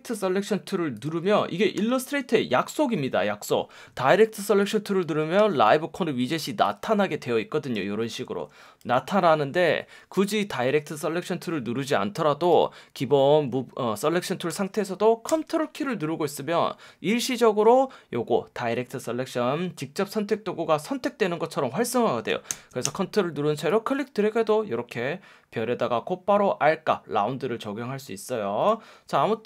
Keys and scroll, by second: 1.7 F1, 5.4 F1, 6.3 F1, 8.8 super+z, 10.1 F1, 14.5 F1.